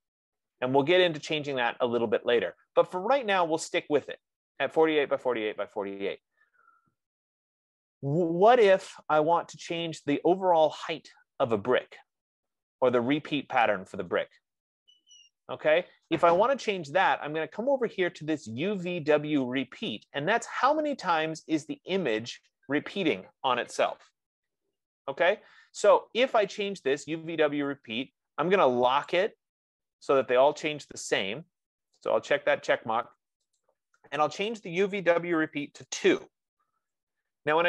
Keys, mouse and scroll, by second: 6.7-11.4 middle drag, 13.2 middle click, 15.1-18.1 middle drag, 32.6 click, 33.9 click, 36.0-36.8 typing, 37.1 Tab.